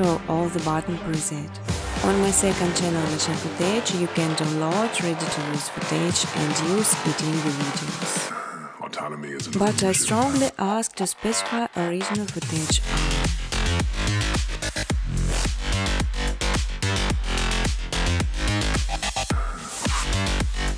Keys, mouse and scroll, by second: 0.0-0.4 typing, 2.9 space, 3.2 space, 4.0 space, 5.3 click, 7.2 click, 8.3-9.0 scroll down 3, 11.0 click, 11.8 scroll down 1, 11.8-12.2 scroll, 13.1 click, 14.1 click, 14.7 click, 16.4 click, 17.1-20.7 typing.